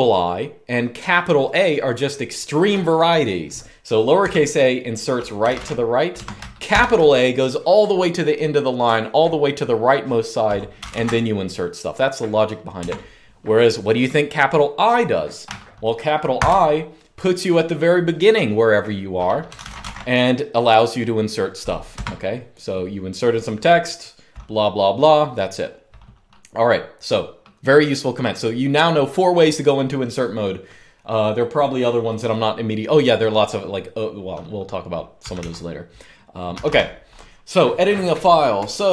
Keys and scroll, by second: 3.9-6.4 typing, 10.3-11.0 typing, 12.6 Escape, 16.1 shift+i, 19.0-20.1 typing, 21.8 Escape, 35.0-36.8 typing, 38.3-38.7 typing.